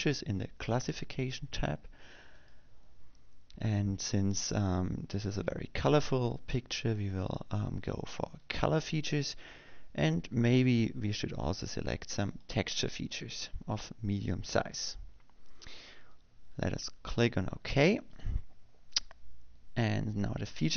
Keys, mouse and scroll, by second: 4.1 click, 10.2 click, 14.0 click, 19.1 click.